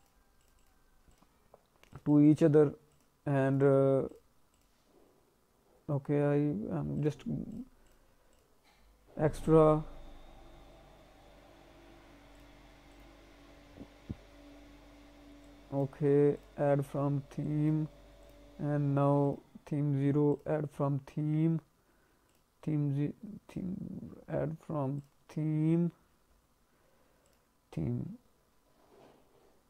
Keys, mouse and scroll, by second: 0.4 click, 0.5 click, 1.1 click, 1.9 click, 2.0 click, 2.2 click, 2.9 click, 3.6 click, 4.1 click, 4.5 click, 6.9 click, 7.5 click, 7.8 click, 10.0 scroll up 1, 10.8 scroll up 1, 12.3 click, 12.9 click, 13.5-13.8 scroll up 3, 14.3 scroll up 1, 14.6 scroll down 1, 15.4 click, 16.3 click, 17.4 click, 18.2 click, 20.3 click, 20.7-21.3 scroll down 2, 21.3-22.0 scroll down 2, 22.3 click, 24.1-24.5 scroll down 1, 25.0 click, 25.4-26.5 scroll down 5, 27.2 click.